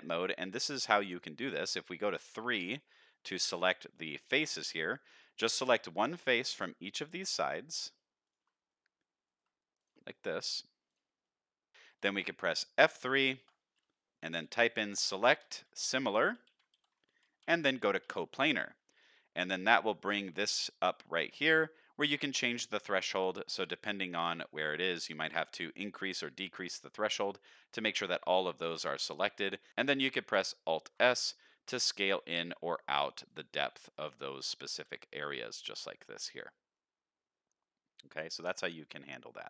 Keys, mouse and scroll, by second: 0.5-1.1 scroll up 1, 1.1 click, 2.7 click, 3.1 middle click, 3.9 shift+middle click, 4.5 middle click, 5.0 scroll down 2, 5.2 shift+middle click, 5.5 middle click, 6.1 shift+click, 6.4 middle click, 7.1 shift+click, 7.5 middle click, 8.2 shift+click, 8.7 middle click, 9.2 middle click, 9.8 shift+click, 10.1 middle click, 10.9 shift+click, 11.2 middle click, 13.4 F3, 17.4 Down, 19.6 click, 22.1 shift+click, 23.8 middle click, 24.6 scroll up 1, 24.9 shift+middle click, 25.3 middle click, 26.0 shift+middle click, 26.4 middle click, 27.1-28.5 middle drag, 28.7 middle click, 30.8 alt+s, 33.6 middle click, 34.8 alt+s.